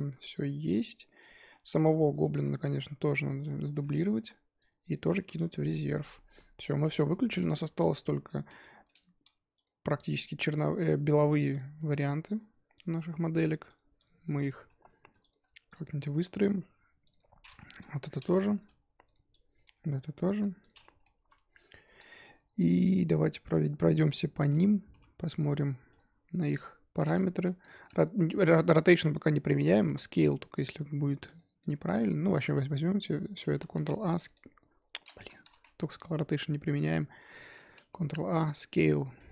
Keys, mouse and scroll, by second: 1.2 click, 1.8 click, 2.3 z, 2.6-3.5 drag, 3.5-4.1 shift+middle drag, 4.1 shift+d, 5.1 m, 6.8-7.3 middle drag, 7.3-7.6 scroll down 3, 7.6 KP_1, 8.0-8.6 scroll up 2, 8.6 drag, 9.2 g, 10.2 click, 10.5-11.0 drag, 11.0 g, 11.9 click, 12.7 drag, 13.2 g, 13.9 click, 14.3 click, 14.6 g, 15.6 click, 15.9 z, 16.2 middle drag, 16.4-17.0 scroll up 3, 17.0 click, 17.2-17.8 scroll down 1, 17.8 KP_7, 18.5 g, 19.3 drag, 19.6 g, 20.6 click, 20.8-21.1 middle drag, 21.1 KP_1, 23.4 click, 24.6 n, 24.9 n, 25.9 click, 27.6-31.2 shift+middle drag, 31.2 click, 31.6-32.2 drag, 32.2 scroll down 3, 32.4-33.0 drag, 33.0-33.6 right drag, 33.6 ctrl+a, 34.3 click, 35.5 ctrl+z, 35.8 scroll up 2, 36.0-38.0 right drag, 38.0 ctrl+a, 39.1 click.